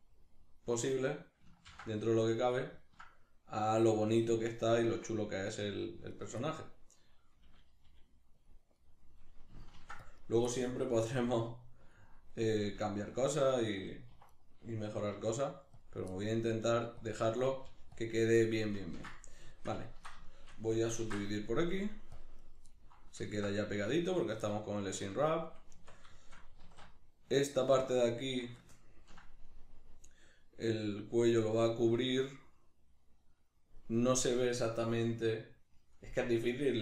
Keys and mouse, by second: 0.8 right click, 1.6 ctrl+x, 2.0-6.1 middle drag, 6.1 right click, 7.8-10.6 middle drag, 7.8 g, 8.5 click, 9.8 ctrl+r, 11.2-13.2 middle drag, 11.2 g, 12.0 click, 13.0 2, 13.2 right click, 14.1 1, 14.3 right click, 15.1 g, 15.8 click, 16.1 middle click, 16.5 right click, 16.6 g, 17.1 click, 17.4 right click, 17.6 g, 18.0 click, 18.4-22.5 middle drag, 21.0 ctrl+r, 22.5 right click, 22.7-36.8 middle drag, 25.0 Tab, 26.6 alt+q.